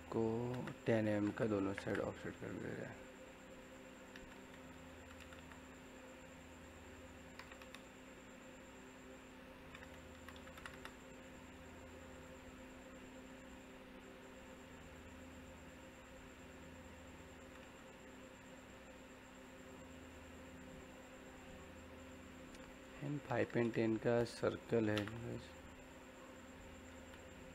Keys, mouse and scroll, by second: 0.5 space, 2.6 click, 4.5-5.4 typing, 6.5 click, 9.9-10.7 typing, 12.0 click, 12.9-15.2 middle drag, 15.2 click, 15.9 middle click, 16.7 scroll down 1, 16.8 middle click, 18.0-18.5 scroll up 1, 19.0 middle click, 19.6 scroll up 1, 19.8-24.8 middle drag, 24.8 c, 24.9 space, 25.2 click, 26.8 d.